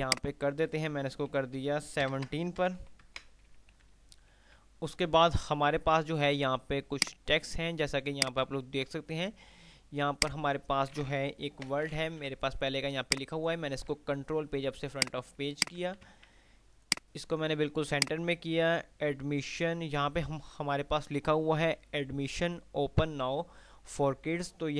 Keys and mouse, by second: 0.3 click, 2.1 BackSpace, 4.1 F3, 7.5 click, 9.8 F2, 10.3 click, 10.6-11.1 F2, 11.8 shift+Page_Up, 12.6 F2, 13.6 click, 15.1 click, 16.3 c, 17.1-23.1 drag.